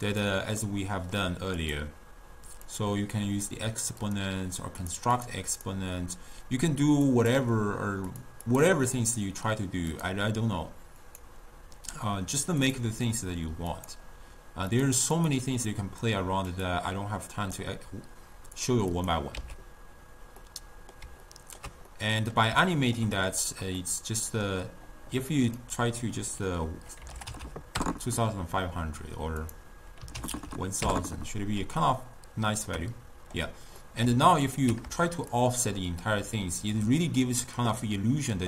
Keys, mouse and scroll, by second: 0.9-1.7 middle drag, 1.7-4.2 drag, 5.0 click, 5.6-8.3 drag, 8.6 click, 10.0-15.0 drag, 16.6 click, 17.7 click, 19.1 click, 19.9 x, 20.5-25.6 middle drag, 25.6-27.5 drag, 27.5 0, 29.5 click, 30.4 0, 30.5 0, 31.9-33.4 ctrl+middle drag, 33.4-33.9 scroll up 1, 33.9 scroll down 1, 34.0-35.4 middle drag, 35.4-38.4 shift+drag.